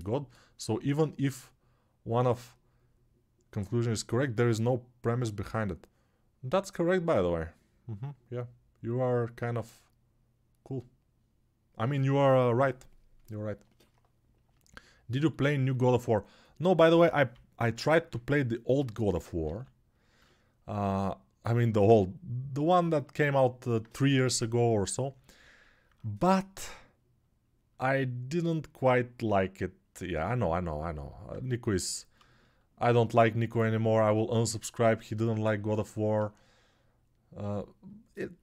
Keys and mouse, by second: 16.7 g, 17.1-17.9 ], 19.3 alt+q.